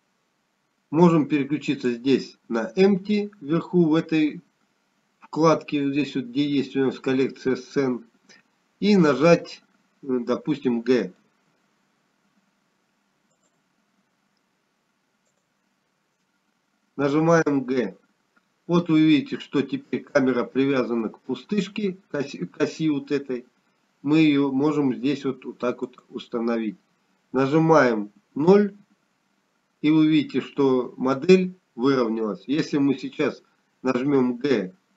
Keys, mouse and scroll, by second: 4.6 click, 14.1 g, 18.2 click, 20.3 g, 31.1 KP_0.